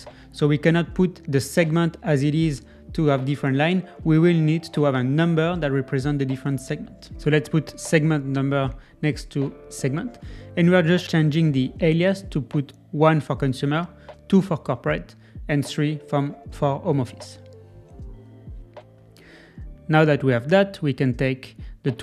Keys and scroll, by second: 13.8 Return, 15.3 Return, 17.1 Return.